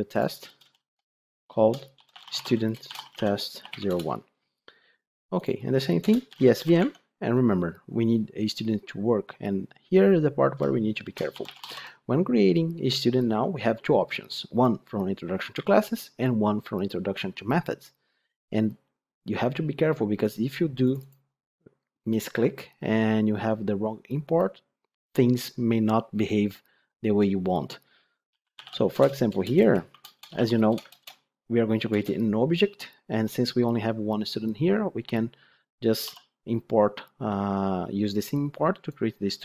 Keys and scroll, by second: 6.8 Tab, 29.2 Return, 30.8 ctrl+space, 31.8 Return.